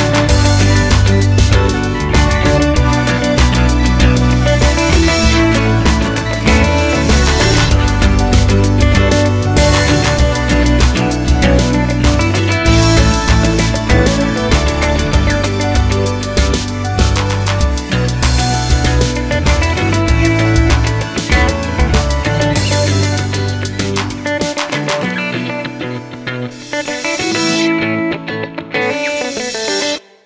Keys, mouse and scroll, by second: 0.3-0.6 scroll up 1, 0.6 1, 0.8 click, 1.3 g, 3.7 ctrl+r, 5.8 ctrl+r, 6.8 click, 8.0-10.7 middle drag, 10.7 ctrl+z, 11.8 shift+click, 13.4 ctrl+r, 16.1 ctrl+z, 16.7 k, 19.2 x, 19.7 2, 19.7 3, 19.8 click, 20.3 x, 21.8 click, 23.6 2, 23.7 click, 24.7 g, 26.9 3, 27.1 click, 27.9-30.2 shift+middle drag, 29.0-29.5 scroll up 2, 29.5 KP_Decimal, 29.8 e.